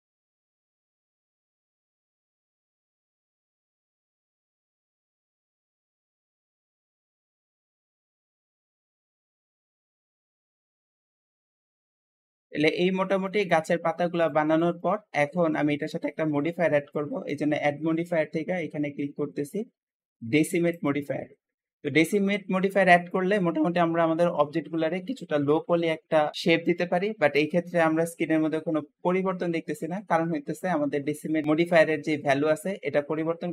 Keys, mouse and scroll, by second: 0.0-0.3 typing, 0.6 Tab, 0.7 middle click, 0.9 click, 1.2 middle click, 1.5-5.2 typing, 1.6 Tab, 1.9-2.3 scroll up 3, 2.3 click, 4.0 shift+middle click, 5.7 shift+middle click, 6.3 shift+click, 6.5-8.6 typing, 8.7 scroll down 5, 8.8 shift+middle click, 9.3 click, 9.5-10.0 scroll down 2, 9.6 shift+middle click, 9.7 click, 9.8-10.7 typing, 11.2 Tab, 11.2 scroll down 3, 11.3 click, 11.4-14.0 middle drag, 14.0 shift+click, 14.5-15.9 shift+middle drag, 15.9-17.1 scroll up 1, 17.2-20.3 shift+drag, 24.1-26.4 middle drag, 32.4-33.5 drag.